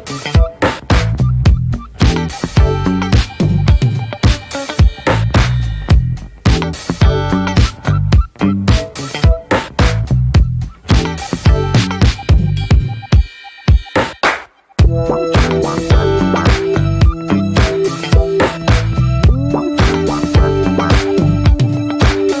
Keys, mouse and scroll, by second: 1.0 click, 1.8 ctrl+z, 2.2 middle click, 2.5 click, 2.9 scroll down 2, 3.4 click, 3.7 ctrl+a, 4.0 middle click, 4.3 ctrl+j, 5.1-5.8 middle drag, 5.1-5.8 scroll up 3, 5.8 click, 7.4-22.4 drag.